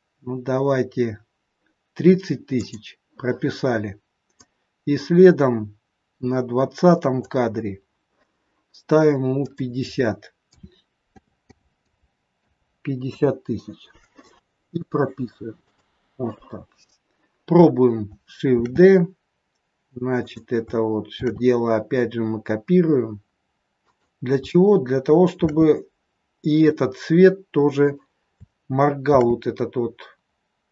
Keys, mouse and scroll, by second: 2.5 click, 4.4 click, 9.4 click, 11.3 KP_0, 15.6 click, 18.5 shift+d, 21.2 shift+d, 25.3 shift+d, 29.1 shift+d.